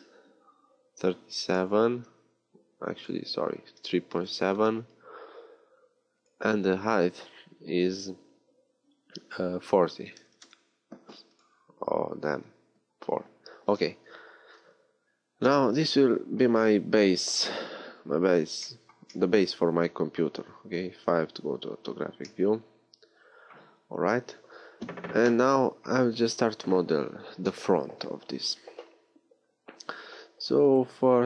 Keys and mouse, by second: 1.9-2.9 middle drag, 8.3-11.2 middle drag, 17.3-21.0 middle drag, 21.0 KP_5, 29.4 Tab.